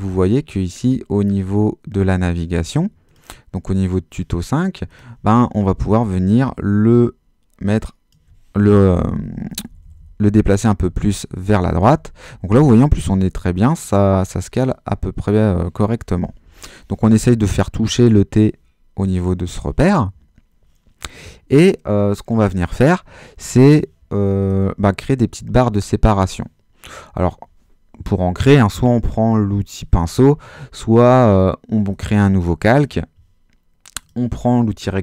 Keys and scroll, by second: 9.0 shift+Right, 10.9 Left, 11.8 Right, 12.2 Left, 12.5 Right, 13.0 Left, 16.4 Left.